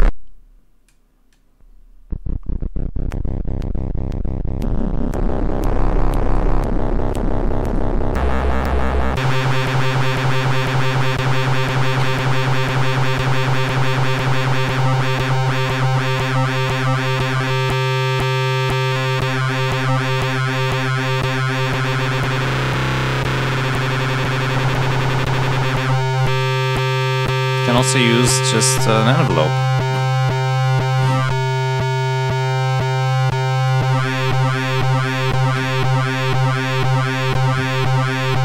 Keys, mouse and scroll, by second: 5.6 click, 7.0 click, 7.6 click, 8.7 click, 10.2 click, 13.0 click, 14.2-15.9 drag, 17.4 click, 18.8 click, 20.4 click, 21.4 click, 27.4 click, 28.1 click, 29.0 click, 29.9 click.